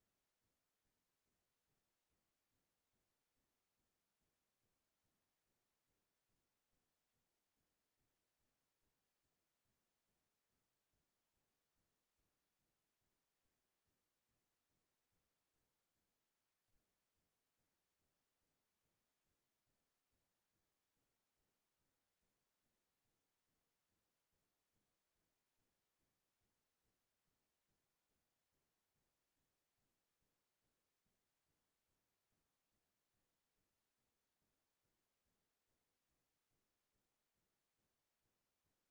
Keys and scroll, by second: 27.0-30.0 typing, 31.1 g, 35.8 n, 36.1 g.